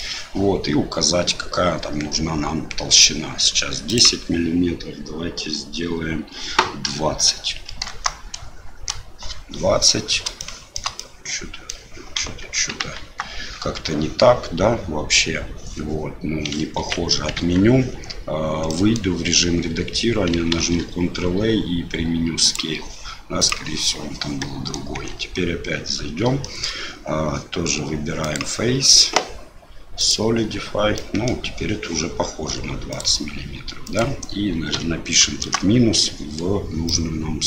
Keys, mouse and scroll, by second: 3.9-9.4 drag, 10.3 shift+middle click, 10.9 middle click, 12.2 KP_1, 12.9 KP_3, 16.8 ctrl+z, 17.3 Tab, 18.6 middle click, 20.6 ctrl+a, 24.4 middle click, 24.9 Tab, 26.4 shift+click, 28.4-30.3 drag, 30.9 middle click, 32.9-36.0 drag, 36.8-37.4 middle drag.